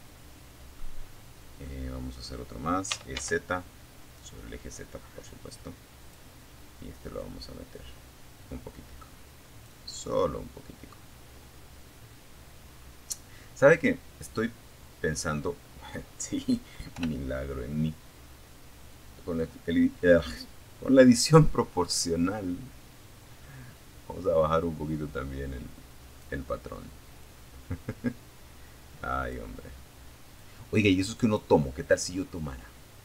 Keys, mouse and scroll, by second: 1.1 e, 1.3 z, 4.2 click, 5.4-8.1 drag, 8.2 scroll down 1, 8.5-11.5 middle drag, 11.5-12.7 drag, 13.5 scroll up 1, 15.1 o, 17.1-18.9 drag, 18.9-19.5 scroll down 1, 19.7 scroll down 1, 20.3 scroll down 1, 22.3 scroll down 1, 25.4-27.7 drag, 28.6-29.7 drag, 30.2-32.0 drag, 32.1 middle click, 32.9 scroll up 1.